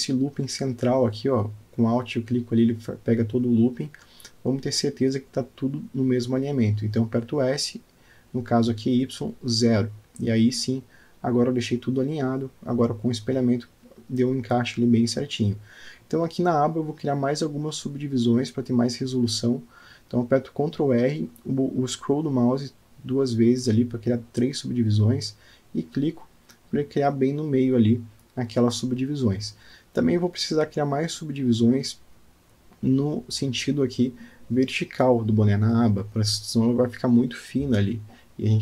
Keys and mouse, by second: 0.5 click, 2.9-6.4 middle drag, 7.8 s, 11.5 Tab, 12.5-14.7 middle drag, 15.7 Tab, 22.3 ctrl+z, 23.2 ctrl+r, 29.5 Tab, 30.2-35.4 middle drag, 35.5 middle click, 36.2 alt+middle click, 37.3-38.3 middle drag.